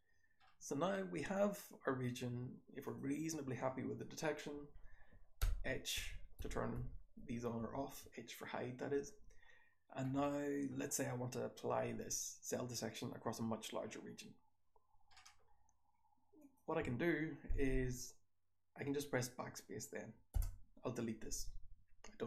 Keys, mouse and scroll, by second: 0.4 scroll down 1, 0.4-1.4 scroll up 2, 1.4 click, 1.4-1.9 scroll up 1, 1.9-2.8 scroll up 1, 2.8 click, 2.8-3.6 scroll up 1, 3.6-5.3 scroll up 1, 5.3-8.9 scroll up 2, 5.3-7.5 typing, 8.9-9.4 scroll up 1, 9.4-12.2 scroll down 2, 12.2-12.6 drag, 12.2-14.2 scroll down 1, 14.2-15.1 scroll down 1, 15.1-16.3 scroll up 1, 16.3 click, 16.3-19.6 scroll up 1, 19.6-20.3 scroll up 1, 20.3 BackSpace.